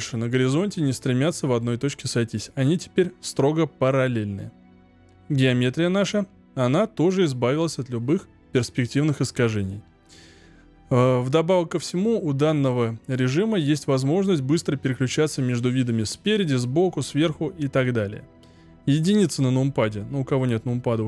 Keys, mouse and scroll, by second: 4.3-7.0 scroll up 7, 7.0-7.7 scroll up 1.